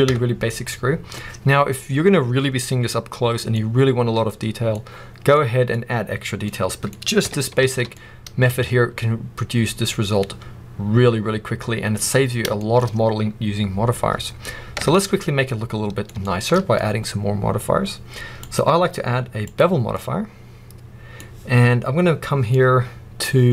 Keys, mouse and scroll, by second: 0.0 Tab, 0.2 scroll down 1, 0.4 middle click, 1.1-2.1 scroll up 1, 3.2 scroll down 1, 3.6-6.4 middle drag, 5.6-6.4 scroll up 2, 6.6 middle click, 7.1 Tab, 7.5 alt+a, 7.8 middle click, 8.9-11.9 middle drag, 12.5-18.3 shift+middle drag, 14.7 Tab, 18.3-19.9 drag, 19.9-23.5 middle drag.